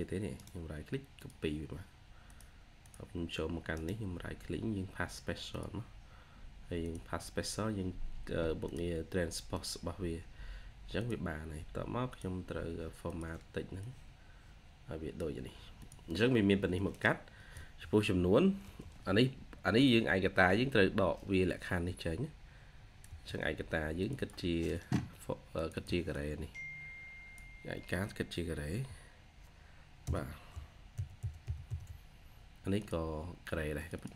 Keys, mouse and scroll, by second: 0.2 right click, 3.6 right click, 10.5-11.5 scroll up 1, 18.5 Delete, 20.1-21.1 scroll up 1, 23.0 Delete, 24.0 double click, 25.6 double click, 28.4-30.4 typing, 30.9 alt+0, 31.1 alt+1, 33.8 double click.